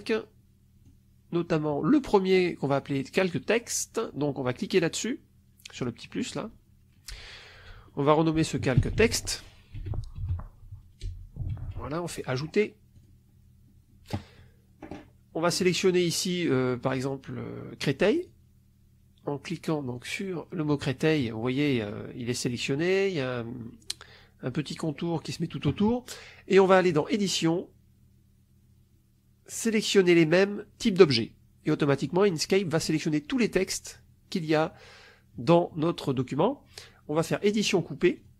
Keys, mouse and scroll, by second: 6.1 click, 8.5-11.9 typing, 12.9 click, 15.5 click, 18.1 click, 19.9 click, 21.7 middle click, 26.8 click, 30.9 click, 37.1 click, 38.1 click.